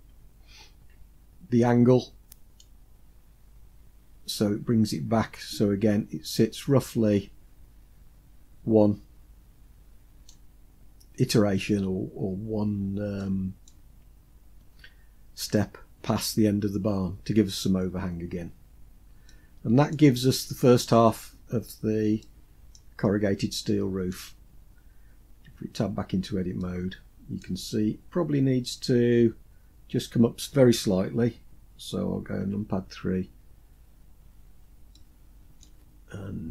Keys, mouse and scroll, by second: 0.3-1.9 scroll down 2, 1.9 scroll down 1, 2.1-9.8 drag, 12.1-12.7 scroll down 3, 12.7 middle click, 17.9-18.8 scroll down 2, 18.8-19.4 middle drag, 18.8 scroll down 1, 21.7-22.2 middle drag, 22.5-22.8 scroll up 2, 23.1-23.6 shift+middle drag, 24.9 Tab, 26.0-26.9 middle drag, 31.8 KP_3, 33.2-34.1 scroll up 6, 34.4-35.2 shift+middle drag.